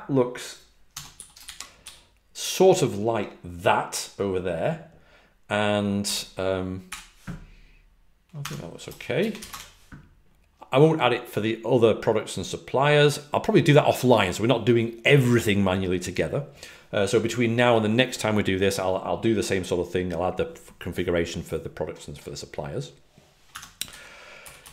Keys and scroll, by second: 0.6-1.6 typing, 6.5-7.3 typing, 8.3 typing, 9.4 Return, 23.4 Escape, 23.8-24.7 typing.